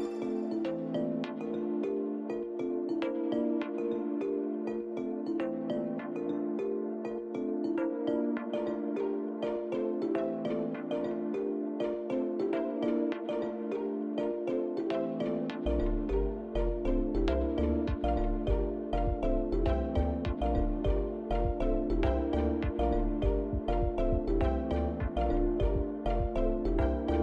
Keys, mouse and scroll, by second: 4.6 click, 5.7-6.1 scroll up 2, 6.9 click, 8.3 click, 14.6 click.